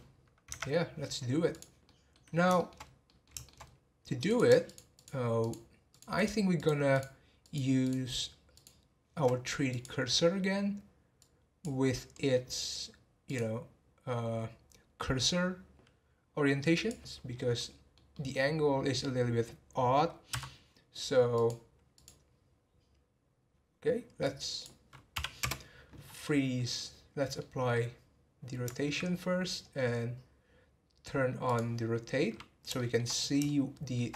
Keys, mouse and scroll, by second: 0.0-0.5 scroll up 4, 0.5 Tab, 1.5 click, 1.8 middle click, 2.3 scroll down 2, 2.5 shift+middle click, 2.8 scroll up 2, 3.0 middle click, 3.6-4.3 scroll up 1, 4.3 click, 4.6 shift+click, 4.9 shift+click, 5.4 shift+click, 5.9 shift+click, 6.1 shift+click, 6.5 shift+click, 6.9 shift+click, 7.4 shift+click, 7.8 shift+click, 8.5 shift+click, 9.7-12.1 drag, 12.1-13.2 middle drag, 13.2-16.4 drag, 17.6-20.3 middle drag, 20.3 n, 21.3 click, 21.9 click, 24.2-26.0 drag, 26.0 scroll down 4, 26.7-29.1 middle drag, 29.1-31.4 scroll up 3, 31.4-32.7 drag, 32.7-33.4 scroll up 2, 32.7 shift+middle click, 33.4-34.1 shift+middle drag.